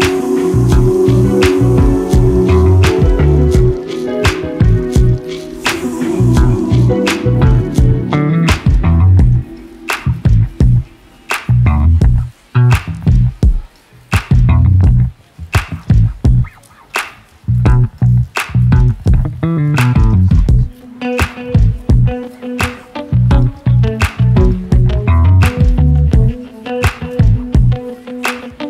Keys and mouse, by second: 2.6-4.9 drag, 6.2 g, 14.7-15.9 middle drag, 22.1 middle click, 23.3 click, 26.5 middle click, 27.7 middle click.